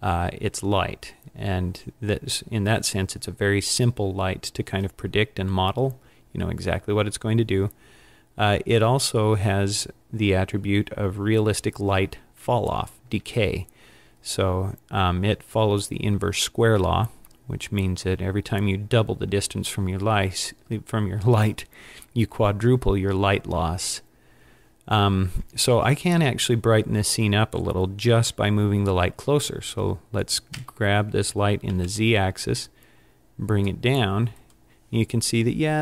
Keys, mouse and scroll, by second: 30.6 g, 30.6 g, 34.7 click.